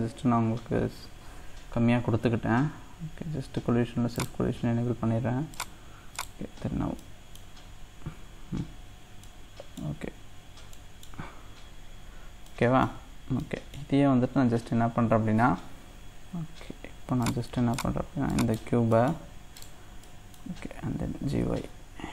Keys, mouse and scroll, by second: 4.2 click, 5.6-6.9 drag, 6.9 scroll down 1, 7.0-8.6 middle drag, 8.6-9.2 scroll up 2, 9.2 middle click, 10.2-10.7 scroll down 1, 10.7 scroll up 1, 10.7-12.2 middle drag, 12.2 scroll down 2, 12.5 middle click, 13.0 scroll up 1, 13.4-16.5 middle drag, 17.2 click, 18.4 click, 18.9 middle click, 19.6 click, 20.1-21.4 middle drag, 21.4 g.